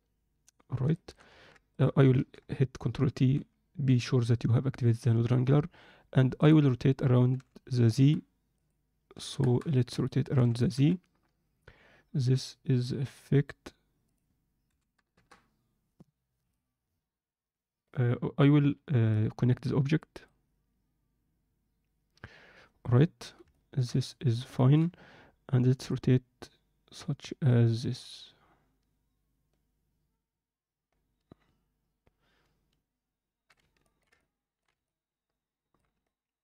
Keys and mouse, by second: 1.0 alt+shift+middle click, 1.6 click, 6.4-7.9 drag, 8.5 click, 9.9 click, 14.0-15.1 drag, 19.2-20.3 drag, 23.5-23.9 alt+shift+middle drag, 24.0 ctrl+middle click, 24.6 alt+shift+middle click, 25.8-33.5 drag, 33.8 ctrl+alt+middle drag, 34.1-34.6 alt+middle drag, 34.8-35.7 ctrl+alt+middle drag, 36.1 ctrl+alt+middle click.